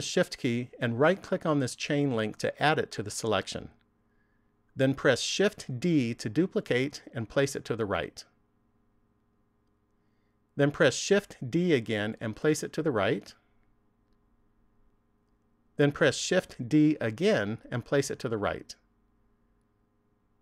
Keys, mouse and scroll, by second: 2.0 shift+right click, 5.7 shift+d, 9.2 click, 11.1 shift+d, 15.1 click, 16.3 shift+d, 19.4 click.